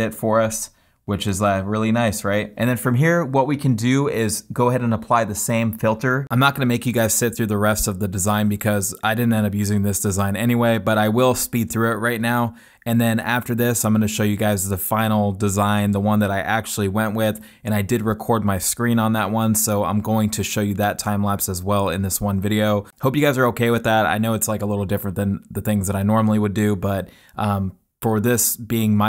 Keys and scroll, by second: 24.7 super+z, 26.2 super+z.